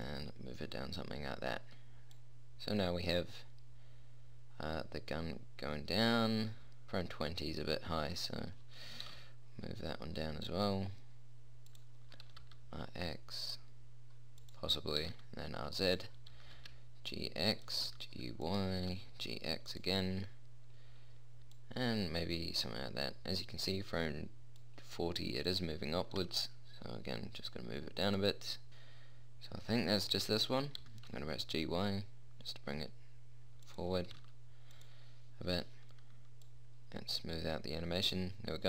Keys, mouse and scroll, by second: 9.3 g, 12.5 r, 15.3 r, 16.7 g, 18.0 g, 19.1 g, 21.9-23.9 middle drag, 25.8-27.7 drag, 26.5 g, 27.8 middle click, 31.1 g, 34.4 r, 36.7-38.5 middle drag.